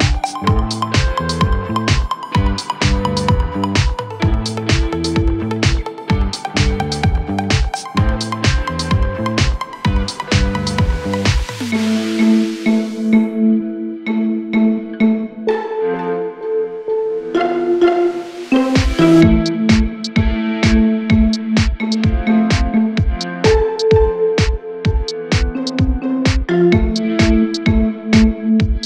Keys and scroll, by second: 0.3 ctrl+d, 0.9 ctrl+d, 1.7 ctrl+d, 2.3 ctrl+d, 2.6 ctrl+d, 2.9 ctrl+d, 3.2 ctrl+d, 6.3 ctrl+a, 11.0 ctrl+a, 25.3 8, 25.5 Tab, 25.7 3, 25.9 Tab.